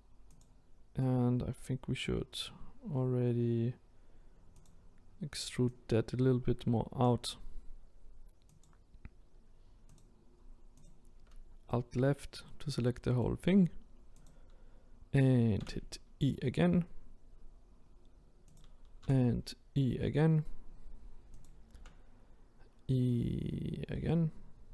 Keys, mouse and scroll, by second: 1.0-4.0 middle drag, 4.7 click, 5.7 click, 10.0 click, 10.8 alt+Left, 11.7-14.2 middle drag, 14.2 click, 15.6 e, 19.0 e.